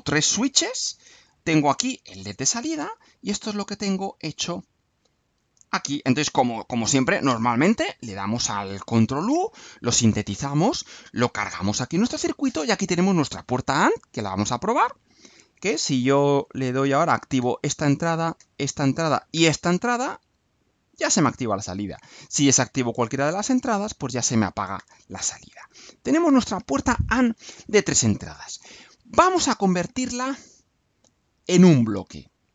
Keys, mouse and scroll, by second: 3.6 scroll down 2, 3.9-5.5 right drag, 5.7 click, 7.2 ctrl+u.